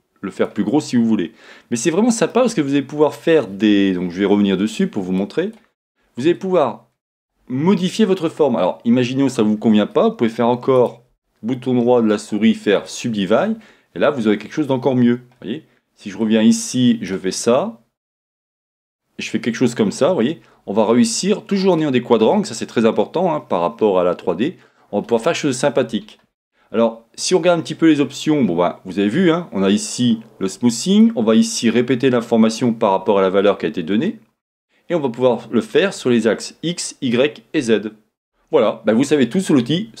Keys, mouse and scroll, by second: 0.8-4.7 middle drag, 4.7-6.4 drag, 10.7-16.2 right drag, 16.2-18.8 drag, 22.3-28.9 middle drag, 28.9-40.0 drag.